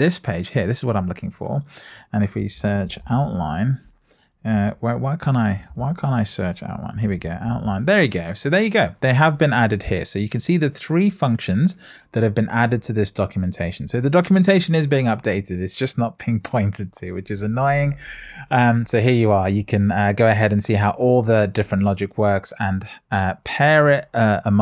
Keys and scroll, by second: 5.4 super+f.